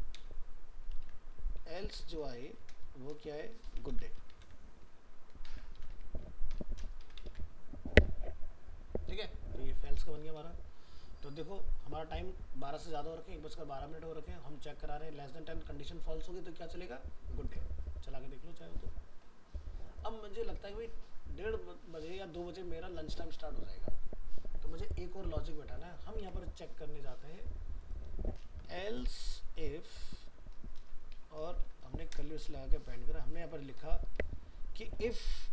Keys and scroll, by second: 0.9 ctrl+z, 3.9 ctrl+c, 4.4 ctrl+v, 5.4 ctrl+shift+Left, 7.3 ctrl+s, 26.2 alt+Tab.